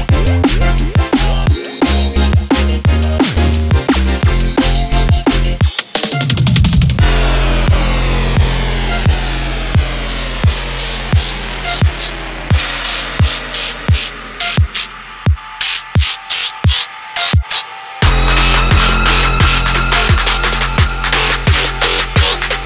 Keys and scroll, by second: 15.0 i.